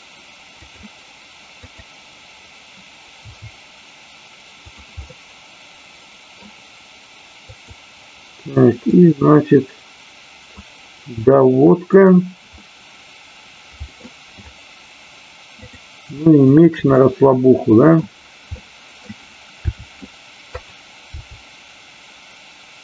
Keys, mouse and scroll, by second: 0.6 click, 3.3 r, 5.0-6.4 middle drag, 7.3 click, 9.0-10.5 drag, 11.7 click, 12.6-14.0 middle drag, 16.4 shift+click, 17.0 middle click, 18.5 middle click, 19.6 r, 20.5 click, 21.0 g.